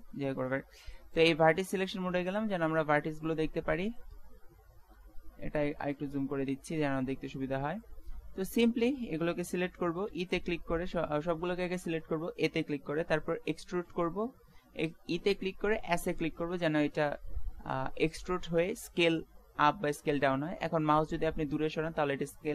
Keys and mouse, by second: 1.2-2.8 drag, 3.3-10.1 middle drag, 10.1 e.